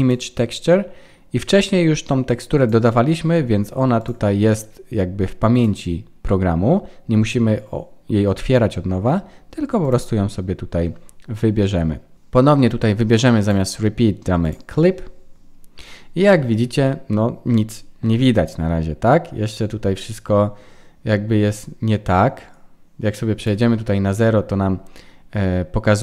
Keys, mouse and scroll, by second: 2.6 click, 5.5 click, 13.4 click, 17.0-18.5 scroll up 1, 21.5 click.